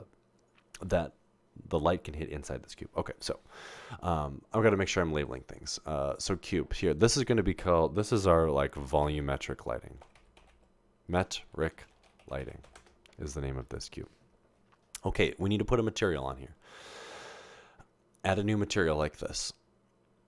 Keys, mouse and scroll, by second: 9.0-12.8 typing, 14.0-14.8 typing, 15.9-16.6 typing, 18.3 click.